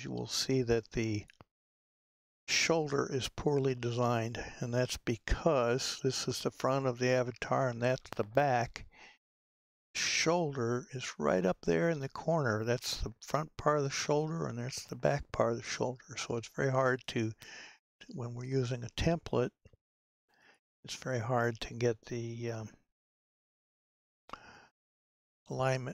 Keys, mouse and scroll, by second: 1.3 click, 3.4-8.2 scroll down 2, 18.0-25.9 drag.